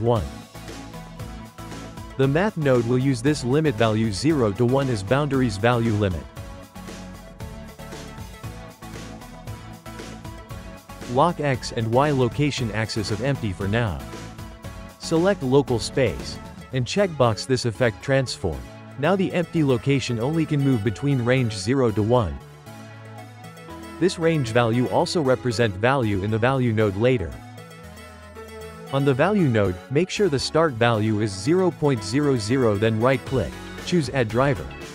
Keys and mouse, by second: 4.5-8.6 shift+middle drag, 11.6 click, 12.5 click, 14.5-17.3 drag, 18.6-20.6 shift+middle drag, 20.6 g, 22.1-23.3 shift+middle drag, 23.3 g, 29.2-33.6 ctrl+middle drag, 33.6-34.9 right drag.